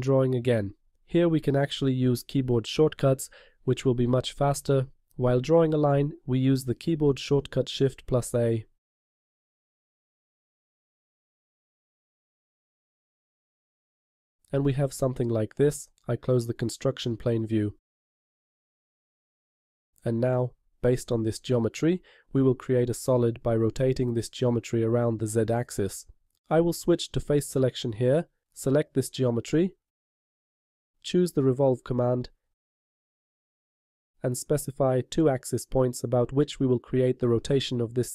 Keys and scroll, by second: 5.1 shift+a.